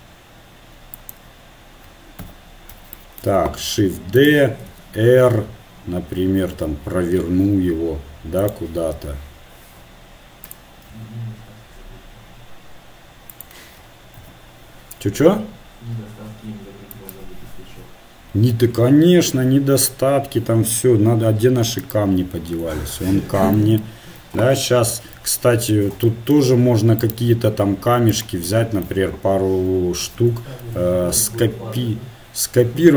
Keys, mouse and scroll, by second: 2.6 KP_7, 3.6 shift+d, 4.7 r, 9.0 g, 10.9 s, 14.5 KP_1, 15.2 r, 21.8 click, 23.0-25.5 drag, 25.5 KP_7, 27.1-28.2 drag, 28.2-29.3 right drag, 29.3-30.4 drag, 30.4 KP_7, 31.2 shift+d.